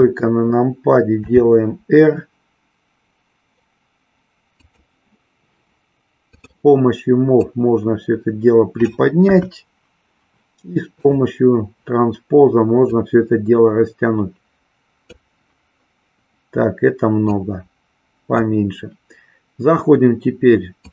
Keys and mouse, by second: 1.2 r, 6.3 click, 7.4-8.8 drag, 9.3 KP_1, 10.9 click, 12.8-15.3 drag, 17.2-18.4 drag.